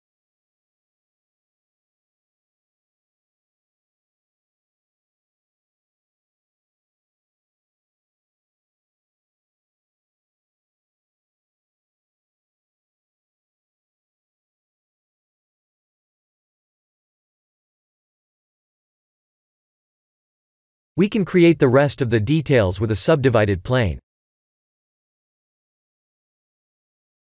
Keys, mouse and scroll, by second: 0.3 click, 2.0 middle click, 2.7 shift+z, 3.3 middle click, 4.4 scroll up 2, 5.1 scroll up 2, 5.5 right click, 7.0 click, 9.4 click, 13.7 KP_1, 13.7 KP_0, 14.5 KP_1, 15.2 click, 15.6 scroll down 3, 15.9 shift+z, 16.9 click, 17.5 shift+z, 18.0 middle click, 20.4 click, 21.0 KP_1, 21.9 shift+a, 26.8 click.